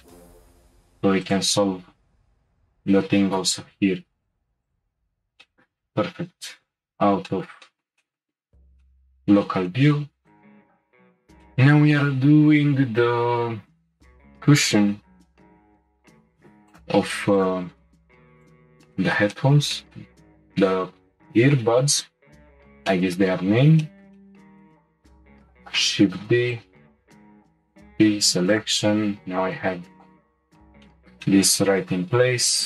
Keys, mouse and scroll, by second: 0.0 scroll up 1, 0.0-1.3 middle drag, 1.3 alt+click, 2.2 e, 3.3 m, 4.9 Tab, 5.4 scroll down 1, 5.4-6.6 middle drag, 6.6 /, 7.3-8.4 shift+middle drag, 8.4-8.8 scroll down 2, 8.8-10.2 shift+middle drag, 10.2 click, 10.8 Tab, 11.4-14.6 shift+middle drag, 16.3 4, 16.8 click, 17.4 click, 18.3 3, 18.4 click, 19.0-20.2 shift+middle drag, 20.2-21.4 scroll up 2, 22.9 shift+middle click, 23.4-23.8 scroll down 2, 23.8 shift+middle click, 24.8-25.6 scroll up 1, 25.6 shift+d, 27.3 p, 28.1 Tab, 28.5 click, 29.1 Tab, 30.0 click, 30.9-32.0 middle drag.